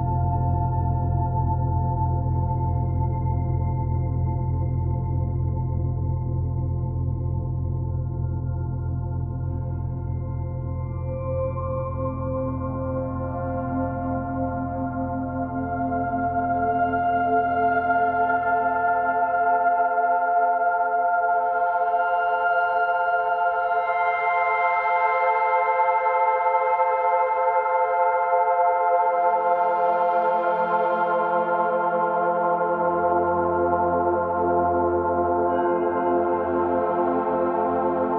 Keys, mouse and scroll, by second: 0.2-0.7 scroll up 5, 0.7-3.6 shift+middle drag, 3.6 click, 3.8 Tab, 4.2 click, 4.7 3, 4.9 click, 5.1 e, 6.5 click, 7.1 e, 8.2 click, 8.4 e, 9.2 click, 9.4 e, 10.3 click, 10.5 e, 11.2 ctrl+z, 11.5 shift+click, 11.9 e, 13.0 click, 13.3 shift+click, 13.8 e, 14.9 click, 15.2 shift+click, 15.6 shift+click, 15.9 e, 16.8 click, 18.3 click, 18.5 e, 19.4 click, 19.6 e, 20.7 click, 21.3-21.9 scroll down 1, 21.9 click, 22.7 shift+click, 23.1 e, 23.7 click, 24.4 click, 24.9 e, 27.0 click, 27.3 e, 28.3 ctrl+z, 28.6 Tab, 28.8-29.6 scroll down 4, 29.0 click, 29.6 click, 29.8 b, 30.3 o, 31.9 o.